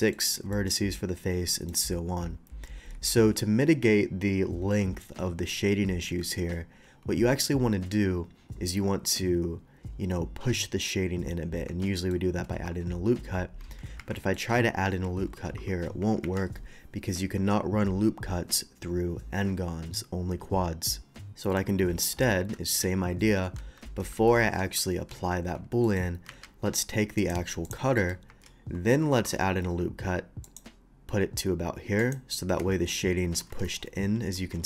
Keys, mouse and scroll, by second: 0.5 middle click, 1.5 middle click, 2.9 Tab, 11.9 middle click, 12.5 ctrl+r, 13.9 Escape, 14.1 middle click, 15.4 ctrl+r, 17.3 Escape, 21.4 middle click, 21.9 ctrl+z, 22.7 ctrl+z, 25.8 middle click, 26.2 q, 27.2 click, 27.6 click, 27.9 middle click, 28.2 Tab, 29.1 ctrl+r, 30.4 ctrl+click, 32.0 click, 32.6 Tab, 33.3 Tab, 33.7 middle click, 33.7 2.